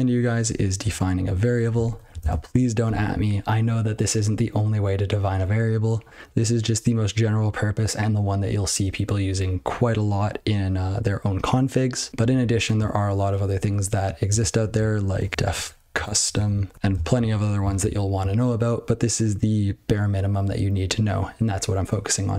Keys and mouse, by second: 0.8 click, 1.7 ctrl+p, 1.9 ctrl+p, 2.0 ctrl+a, 6.2 ctrl+g, 12.1 ctrl+n, 12.3 ctrl+n, 14.6 ctrl+shift+o, 15.1-16.9 typing, 17.0 ctrl+n, 17.1 ctrl+w, 17.7 ctrl+s.